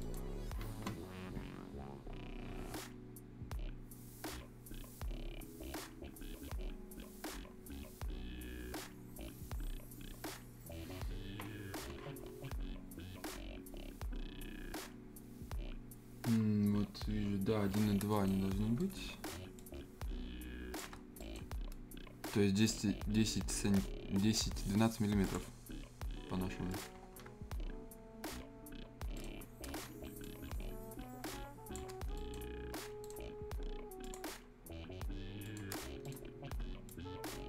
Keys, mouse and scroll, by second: 0.0 right click, 1.4-5.4 scroll down 1, 5.4-10.9 scroll down 1, 17.8 scroll up 1, 18.1 right click, 18.4 scroll up 1, 18.8 right click, 19.5-20.9 shift+drag, 20.9 shift+scroll up 1, 21.2 shift+right click, 21.5-21.9 scroll up 1, 22.2-25.2 drag, 25.6 scroll up 1, 26.7 click, 26.9-27.8 scroll down 2, 29.1 shift+right click, 29.7-30.2 scroll up 1, 30.2-31.9 drag, 31.9-32.8 shift+scroll down 2, 32.1 shift+right click, 33.0 right click, 34.0 click, 36.0 right click, 36.3 scroll up 1, 36.9-37.4 drag.